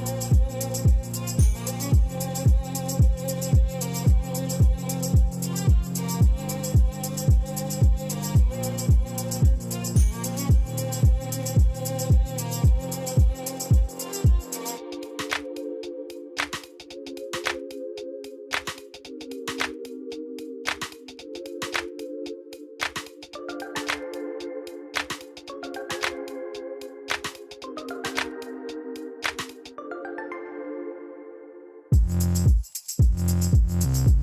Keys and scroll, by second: 0.7 g, 1.2 Escape, 1.4 g, 1.6 z, 2.3 Escape, 5.4 g, 6.1 Escape, 6.3 g, 6.4 z, 8.1 Tab, 13.4 Tab, 15.7 2, 17.9 g, 18.0 z, 19.8 Tab, 22.1 Tab, 22.5 g, 22.6 z, 23.7 Tab, 31.9 shift+a, 32.3 b, 32.4 u, 32.5 m, 33.7-34.2 typing.